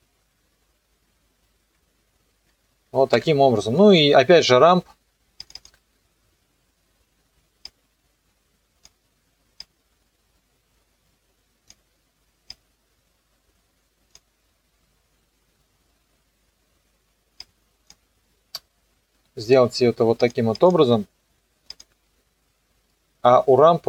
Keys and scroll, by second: 3.1 KP_0, 3.9 space.